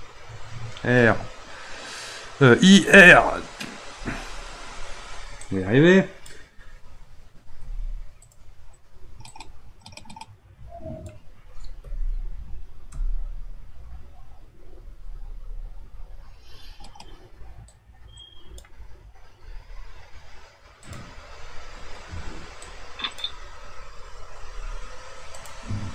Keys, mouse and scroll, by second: 5.5-7.6 drag, 7.6 r, 9.3-11.8 drag, 11.8 typing, 12.9 r, 15.1 typing, 17.7-19.4 drag, 19.4 r, 22.6-24.3 drag, 24.3 r.